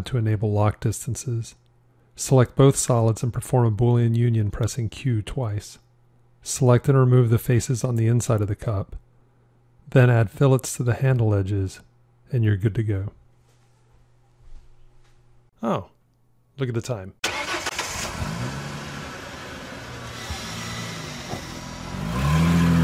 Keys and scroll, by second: 0.0 Tab, 4.3 q.